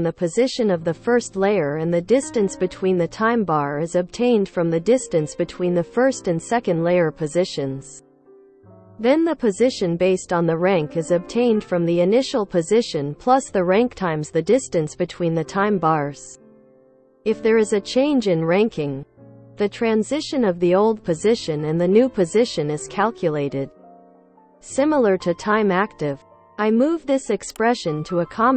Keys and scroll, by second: 27.2 Escape, 28.4 shift+z.